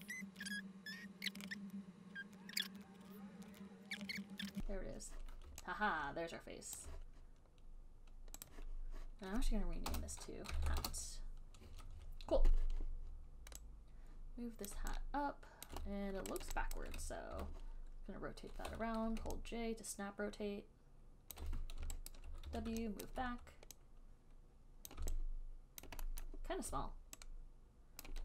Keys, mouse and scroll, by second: 0.4 click, 2.3 click, 2.8 click, 2.8 click, 3.5 click, 4.0 click, 4.5 click, 4.6 click, 7.0 alt+click, 8.7 click, 10.2 Return, 10.5-11.4 typing, 15.0 click, 15.9 alt+click, 16.6 alt+right click, 17.0 alt+click, 17.6 e, 19.4-21.5 j, 20.7 j, 21.6 click, 21.6 j, 22.3 alt+click, 22.7 w, 23.3 alt+click, 23.4 alt+right click, 25.1 click, 26.1 alt+click, 26.5 alt+middle click.